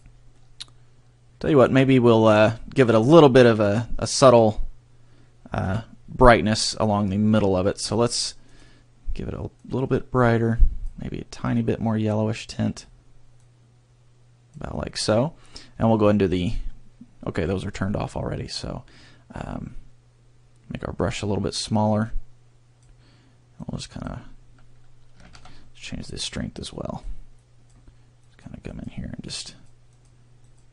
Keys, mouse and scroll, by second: 0.3 middle click, 5.6 KP_3, 8.4 click, 15.7-16.5 scroll down 11, 20.9-22.0 scroll up 8, 22.0 click, 23.6 click, 25.4 ctrl+z, 26.2 click, 27.3 click, 28.2 click, 28.6 click, 29.4 click, 29.9 click, 30.4 click.